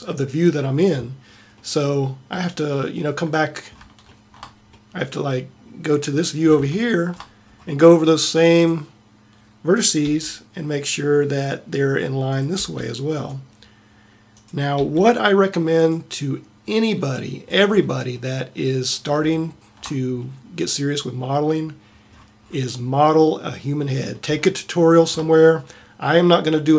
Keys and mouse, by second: 3.8 middle click, 8.6-10.1 middle drag, 10.1 g, 10.5-12.4 drag, 12.5 g, 14.8 g, 16.5 middle click, 18.8 middle click, 19.8 middle click.